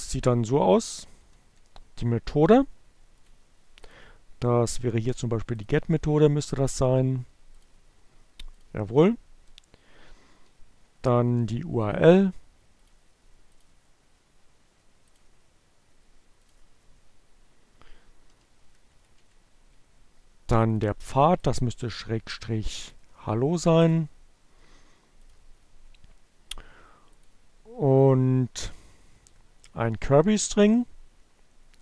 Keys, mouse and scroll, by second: 0.0 click, 1.9 click, 6.4-7.6 drag, 8.6 click, 10.9 Down, 12.3 click, 13.1 click, 15.1 click, 16.9 click, 19.2 Down, 19.3 Left, 19.6 End, 20.8 click, 21.8 click, 23.3 click, 24.4 click, 25.3 click, 26.8-28.3 drag, 29.0 Down, 29.0 Left, 29.1 BackSpace, 31.3 click.